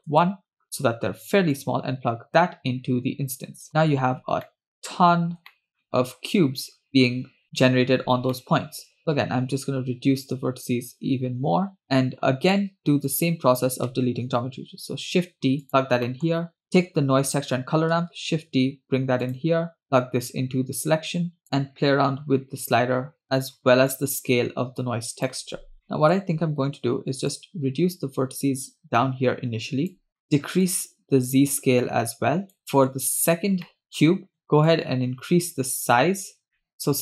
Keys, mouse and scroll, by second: 1.6-3.7 drag, 3.8-4.5 scroll up 2, 4.5-5.0 middle drag, 5.1-5.5 scroll up 2, 5.5 shift+middle drag, 5.7 scroll down 3, 5.9-6.9 middle drag, 7.5-8.0 scroll up 1, 8.3 middle click, 9.0-11.8 shift+drag, 11.8 middle click, 11.8 scroll down 2, 12.0-12.5 scroll up 1, 12.5 scroll down 1, 13.2 click, 14.2 shift+d, 16.1 middle click, 16.6-17.4 drag, 18.1 shift+d, 19.8-21.4 drag, 21.4 middle click, 21.4 scroll down 2, 21.6-23.2 drag, 23.2-23.9 scroll up 1, 23.9-25.3 drag, 25.7 scroll down 1, 25.9 middle click, 27.4-30.0 shift+drag, 30.1 scroll down 2, 30.2 middle click, 30.2 scroll up 2, 30.7-32.6 shift+drag, 32.6 middle click, 32.6 scroll down 2, 33.3-33.7 scroll up 2, 33.7 middle click, 34.1 scroll up 1, 34.7-36.4 shift+drag, 36.5 middle click, 36.7-37.0 shift+drag.